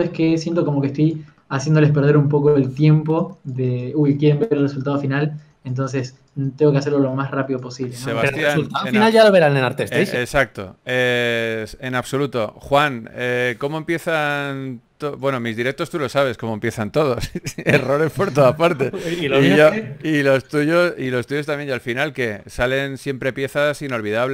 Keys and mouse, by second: 1.9 g, 2.1 f, 3.1 KP_3, 4.1 f, 8.2-14.6 drag, 14.6-16.0 middle drag, 16.5 click, 16.6 a, 17.5 click, 17.5 right click, 18.4-19.5 right drag, 19.5 KP_3, 20.3 shift+d, 20.7 g, 22.1 alt+s, 23.3 g.